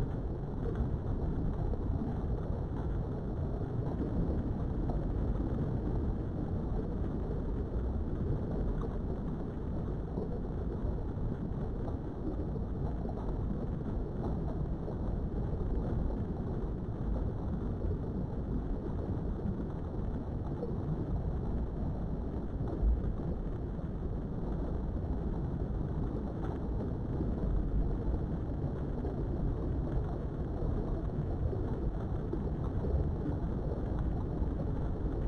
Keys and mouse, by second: 0.7 right click, 1.6 ctrl+r, 2.4 right click, 3.0 click, 4.0 g, 4.8 click, 5.4 click, 5.7 g, 6.6 click, 7.5 click, 8.1 right click, 8.9 click, 9.3 g, 9.9 click, 10.8 click, 11.1 g, 11.9 click, 13.0 shift+middle click, 15.2 KP_3, 19.1 click, 20.1 click, 22.6 ctrl+r, 23.3 right click, 23.7 click, 24.1 click, 27.3 g, 29.4 click, 32.8 shift+middle click.